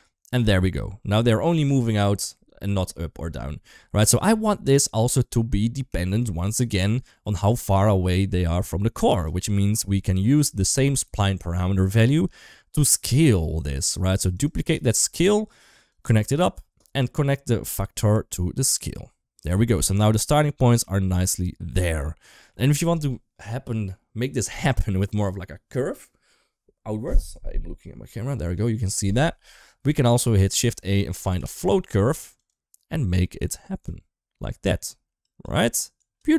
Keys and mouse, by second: 0.4-0.8 middle drag, 1.3 shift+middle click, 1.6 middle click, 5.8 shift+middle click, 6.4 drag, 6.9 g, 9.7 shift+middle click, 10.4 middle click, 12.2-12.7 drag, 12.9 g, 14.1 click, 14.6 shift+d, 17.5 click, 17.7-18.8 drag, 19.5-19.9 middle drag, 20.4 middle click, 21.8-22.3 middle drag, 30.0 shift+a, 33.2 click, 35.0 click, 35.9 click.